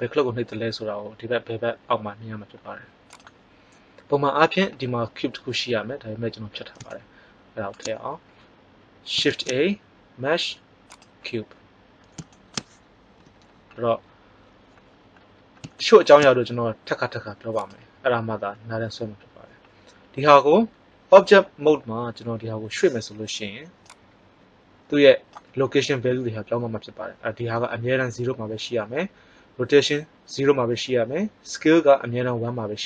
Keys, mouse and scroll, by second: 6.9-7.7 middle drag, 9.2 shift+a, 13.1 n, 23.8-26.0 drag.